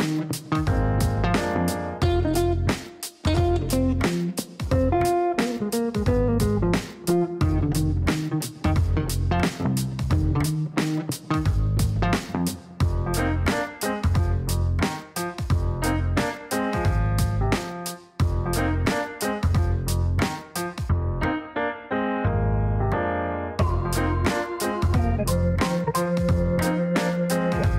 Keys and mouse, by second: 0.1 KP_Enter, 4.8 click, 6.5 KP_3, 6.6 KP_0, 6.9 KP_Enter, 10.1 click, 11.9 KP_0, 12.4 KP_Enter, 16.5 click, 17.5 KP_1, 17.5 KP_0, 17.9 KP_Enter, 20.6 click, 21.6 KP_1, 21.7 KP_5, 22.0 KP_Enter.